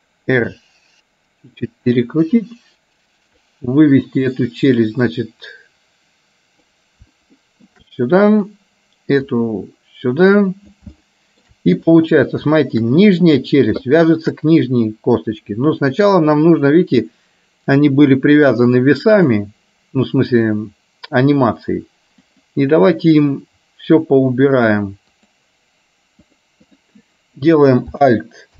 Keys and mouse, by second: 0.5 r, 3.6 click, 5.3-6.7 drag, 7.5 shift+middle click, 8.6 click, 9.3-10.8 drag, 11.0 shift+middle click, 12.7 shift+middle click, 14.1 shift+middle click, 19.2 click, 22.3 click, 25.3 click, 26.3 click, 26.8 click.